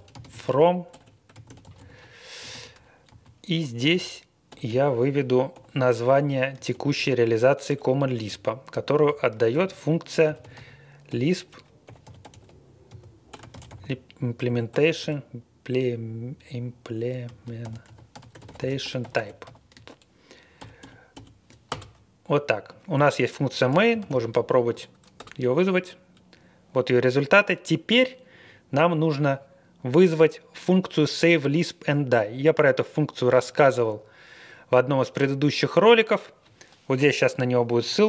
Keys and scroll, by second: 0.0-5.5 typing, 6.7 shift+', 7.7 Return, 8.3-15.0 typing, 17.0-21.1 typing, 21.7 Return, 23.7-24.5 typing, 25.2 Return.